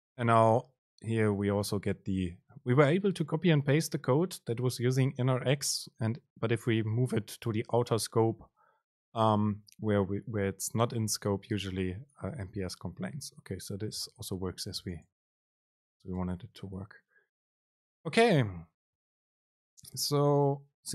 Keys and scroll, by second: 15.1 shift+Left, 16.0 BackSpace.